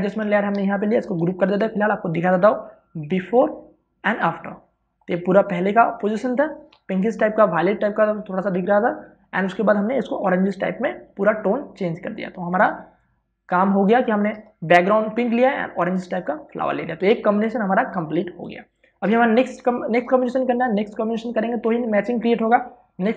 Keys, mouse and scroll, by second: 1.6 ctrl+g, 3.8 click, 10.5 click, 13.4 space, 13.7 ctrl+click, 17.9 space, 18.1 ctrl+click.